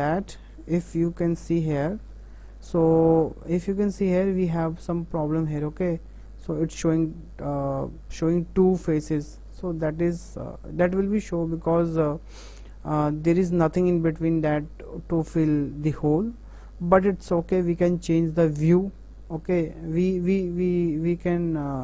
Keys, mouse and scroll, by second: 2.1 KP_0, 3.0-3.5 scroll up 4, 3.7 middle click, 4.2 middle click, 4.5 scroll up 2, 5.2 middle click, 5.6-8.1 shift+middle drag, 8.4-9.3 middle drag, 9.9 middle click, 10.4 middle click, 10.6 middle click, 10.8 middle click, 11.1 middle click, 11.3 middle click, 11.5 middle click, 13.0 middle click, 13.2-14.5 middle drag, 14.8-16.1 middle drag, 16.1-16.6 scroll down 3, 16.8 middle click, 17.2 middle click, 17.7 middle click, 18.6 middle click, 19.6-21.0 middle drag, 21.4 middle click.